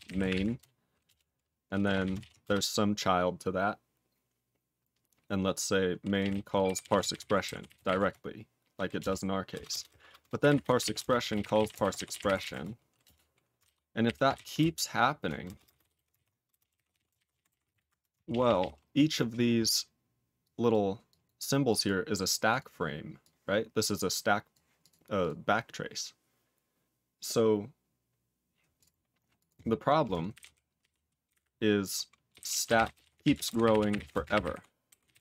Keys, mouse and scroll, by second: 0.0-0.5 typing, 1.0 Return, 1.8 -, 2.0 -, 2.1 ctrl+d, 2.4 space, 5.9-12.8 typing, 8.9 Return, 10.8 ctrl+d, 13.0 Return, 13.6 ctrl+/, 14.0 ctrl+o, 14.3 ctrl+n, 14.5-18.2 typing, 16.1 ctrl+d, 18.3 ctrl+p, 18.4 ctrl+a, 18.4 ctrl+p, 18.5 ctrl+p, 20.4 click, 20.7 click, 21.0 click, 21.2 click, 21.6 click, 21.8 click, 22.4 click, 23.2 click, 24.5 click, 24.8 click, 25.2 click, 28.7 click, 29.3 click, 30.3 ctrl+o, 30.3 ctrl+n, 30.8 ctrl+p, 31.2 ctrl+n, 31.3 ctrl+o, 32.0-35.2 typing.